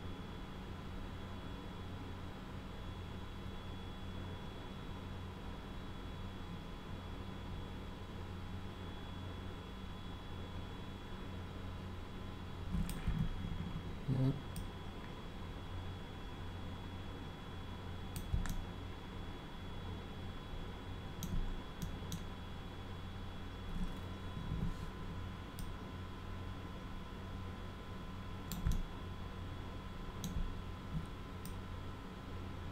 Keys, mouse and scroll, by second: 13.1 w, 14.5-18.1 drag, 18.5-21.2 alt+middle drag, 21.8-22.1 middle drag, 25.6-28.5 drag, 28.7-30.2 alt+middle drag, 31.4-32.7 drag.